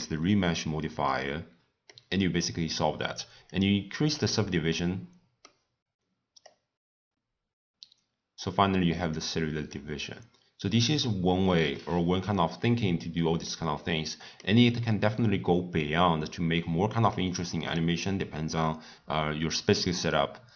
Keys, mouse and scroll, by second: 0.5-1.1 scroll up 2, 1.1-3.7 middle drag, 3.7-4.7 drag, 4.7-6.7 middle drag, 6.7-9.7 drag, 9.7-16.0 middle drag, 16.0-16.6 scroll down 1, 16.6-17.0 scroll down 1, 17.0 scroll up 1, 17.1-20.5 middle drag.